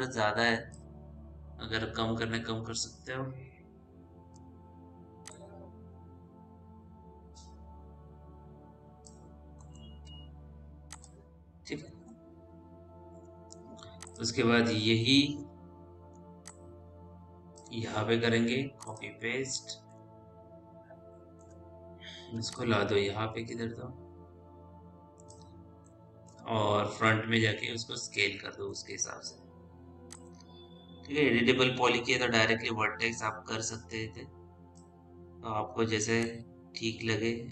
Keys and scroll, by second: 4.2 r, 10.3 p, 15.3 w, 26.8 f, 28.6 e, 29.1 r, 35.6 w.